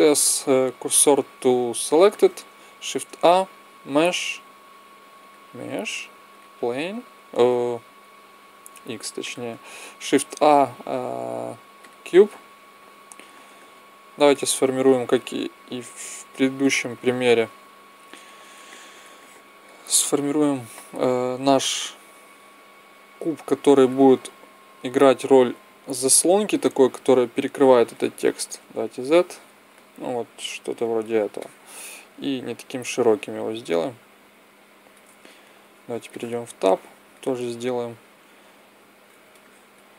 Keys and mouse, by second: 0.0 shift+s, 2.7 shift+a, 8.7 x, 10.0 shift+a, 14.1-16.8 drag, 17.4 KP_1, 18.6 click, 21.1 m, 26.6-28.4 drag, 28.5 z, 30.2 click, 31.3 middle click, 33.1 middle click, 33.3-34.8 drag, 35.5 Tab, 36.0-38.3 middle drag, 38.4 a, 39.0 b.